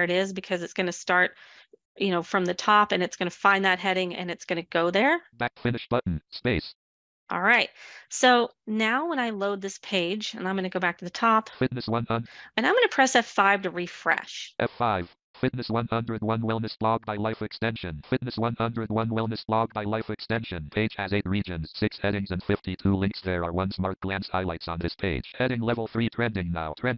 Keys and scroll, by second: 12.3 F5.